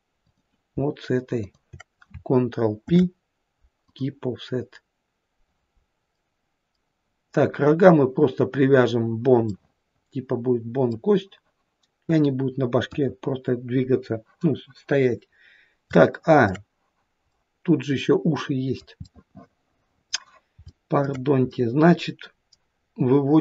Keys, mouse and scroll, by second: 0.3 click, 1.4 shift+click, 2.9 ctrl+p, 6.2 middle click, 9.5 middle click, 12.9 KP_1, 15.1-15.8 scroll up 2, 15.9 shift+middle click, 16.5 shift+middle click, 17.4 middle click, 18.3 middle click, 19.7 middle click, 20.7 shift+middle click, 21.5 middle click.